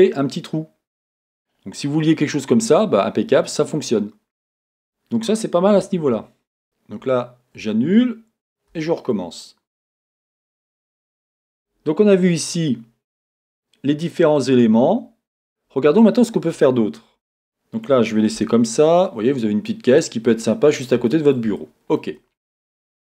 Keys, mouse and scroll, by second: 2.1 scroll, 5.9 z, 10.1 click, 15.4-15.9 scroll, 15.9-23.0 middle drag, 18.3 Tab, 19.9 scroll down 1, 22.8 scroll up 1.